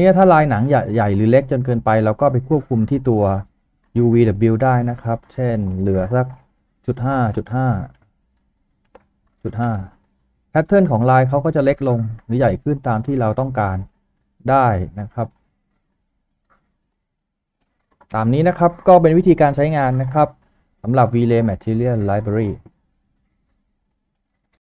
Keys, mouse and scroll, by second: 6.6-7.8 typing, 8.9-9.5 typing, 9.0 Tab, 9.7 Return, 12.3-12.8 scroll up 1, 12.8 middle click, 16.0 scroll up 1.